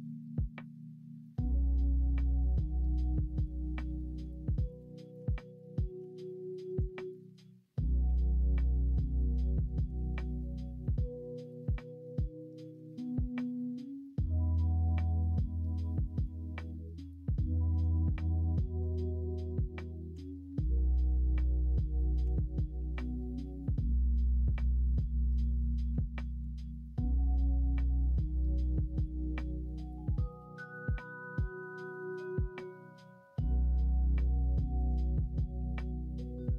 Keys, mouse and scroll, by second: 1.8 middle click, 3.5-5.1 middle drag, 5.1 Tab, 5.9 middle click, 6.0 Tab, 8.0 2, 9.9 middle click, 10.9 middle click, 17.9 shift+d, 20.1 f, 21.1 ctrl+z, 22.2 ctrl+f, 24.5 middle click, 24.9 s, 30.3 scroll up 1, 30.4 middle click, 30.5 scroll down 1, 30.8 scroll up 1, 30.9 middle click, 31.3 middle click, 32.8-34.0 middle drag, 35.0 alt+s.